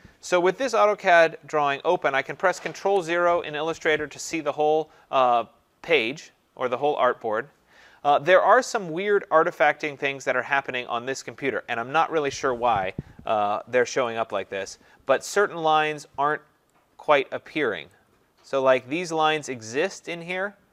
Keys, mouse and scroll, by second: 2.8 ctrl+0, 13.3 ctrl+=, 13.6 ctrl+=, 13.9 ctrl+=, 14.1 ctrl+=, 15.2-15.9 typing, 16.0-17.3 scroll, 16.3 click, 17.2 click, 17.3 click, 17.5 click, 17.6 click, 17.8 click, 17.8 click, 17.9 click, 18.0 click.